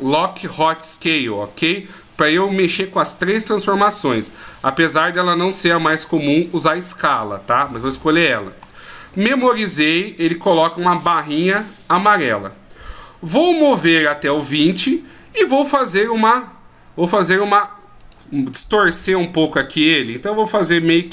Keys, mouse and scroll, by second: 10.1 click, 12.9 click, 18.0 right click, 20.8 r.